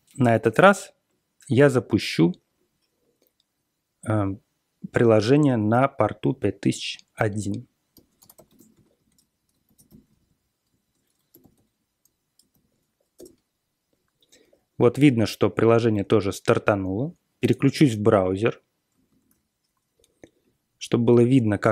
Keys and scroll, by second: 7.7-13.0 typing, 13.1 Return, 17.7 super+Tab, 18.9 super+Tab.